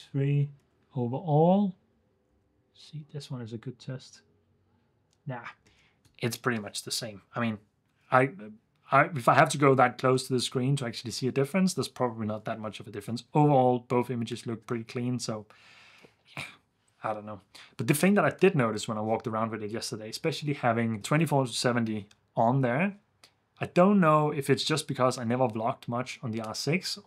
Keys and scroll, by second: 0.8 super+f, 5.7 super+f.